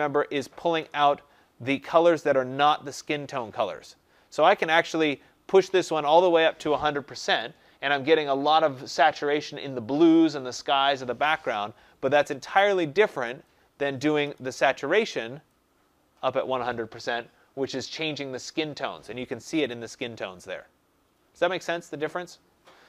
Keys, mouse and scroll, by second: 7.3-12.4 drag, 13.7-15.9 drag, 14.2 0, 17.5 click.